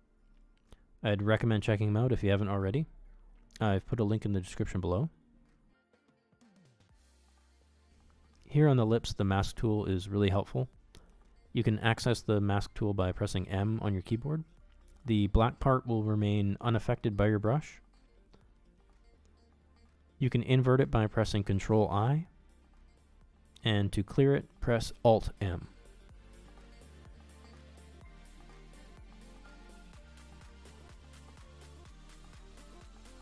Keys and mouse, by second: 0.3 ctrl+click, 0.9 ctrl+z, 1.1 ctrl+z, 1.2 click, 1.3 click, 1.5 click, 1.6 click, 1.7 click, 1.8 click, 2.2 shift+middle click, 3.0 f, 3.4 shift+click, 4.3 shift+click, 4.4 middle click, 5.0 f, 5.1 shift+c, 5.3 click, 5.7 click, 5.9 click, 6.0 click, 6.6 shift+click, 6.8 shift+c, 6.9 click, 7.4 click, 7.5 click, 7.9 x, 8.0 ctrl+click, 8.4 ctrl+click, 8.9 middle click, 9.2 middle click, 9.6 f, 9.7 c, 9.8 click, 10.4 middle click, 10.6 shift+middle click, 10.8 m, 10.9 click, 11.8 click, 12.6 f, 12.8 c, 12.8 click, 13.1 click, 13.5 middle click, 13.8 click, 14.1 f, 14.3 middle click, 14.5 shift+click, 15.1 shift+c, 15.4 click, 15.6 click, 15.8 ctrl+z, 16.0 ctrl+z, 16.2 click, 16.3 click, 16.5 click, 16.8 click, 16.9 click, 17.4 middle click, 17.7 middle click, 18.6 middle click, 19.0 ctrl+i, 19.2 middle click, 19.3 shift+middle click, 19.7 f, 19.9 c, 19.9 click, 20.8 click, 20.9 click, 22.0 middle click, 23.7 alt+m, 23.9 middle click, 24.0 middle click, 24.1 middle click, 24.3 KP_1, 24.7 f, 24.9 f, 25.0 c, 25.1 click, 25.7 ctrl+click, 26.2 ctrl+click, 26.4 shift+click, 26.5 f, 27.4 shift+click, 27.8 shift+click, 28.4 middle click, 28.6 middle click, 28.8 middle click, 29.5 f, 29.8 middle click, 30.5 f, 30.8 g, 31.0 f, 31.2 click, 31.7 click, 32.0 click, 32.4 middle click, 32.5 click, 32.8 middle click, 33.0 click.